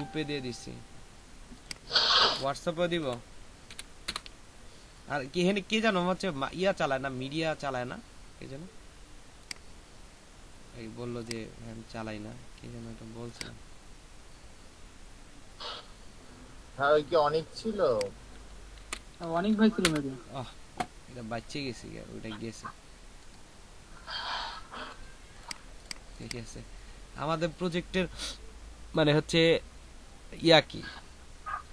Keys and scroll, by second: 2.8-4.0 typing, 18.7 ctrl+v, 19.8 Return.